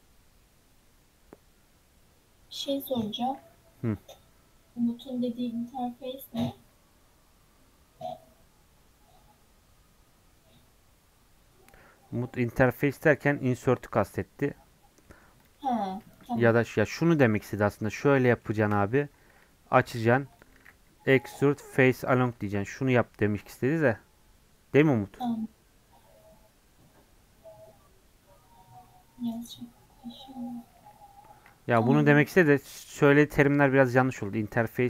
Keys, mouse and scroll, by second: 3.2-3.9 scroll down 1, 3.9-6.2 scroll up 1, 6.2-15.0 scroll up 1, 15.0 middle click, 15.4 click, 15.6 middle click, 15.9 Tab, 16.2 shift+middle click, 16.8 ctrl+r, 18.2 middle click, 18.8 scroll up 2, 19.1 ctrl+b, 21.2 alt+e, 22.3 Tab, 28.9-32.0 middle drag, 32.0 ctrl+z, 32.4 ctrl+z, 34.2 ctrl+z, 34.7 middle click.